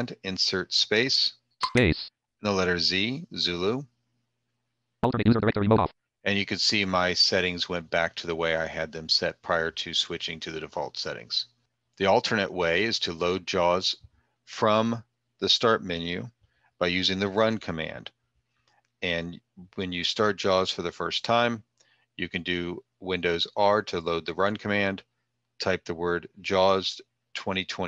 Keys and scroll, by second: 2.3 z.